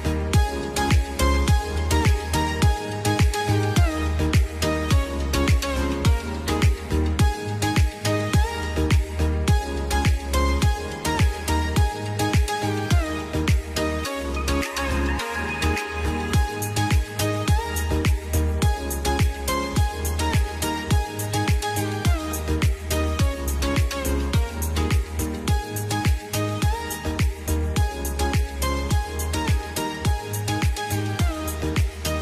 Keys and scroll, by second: 29.6 F2.